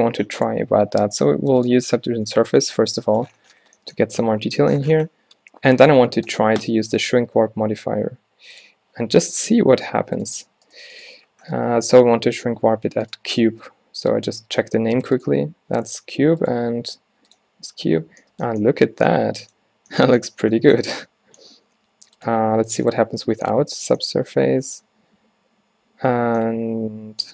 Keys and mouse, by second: 2.3-8.7 drag, 4.2 Tab, 5.8 Tab, 10.2-11.1 drag, 11.1-12.7 right drag, 12.7-14.8 middle drag, 15.4-16.5 right drag, 16.5-17.8 middle drag, 17.8-18.4 drag, 18.9 z, 19.8 z, 23.7 z.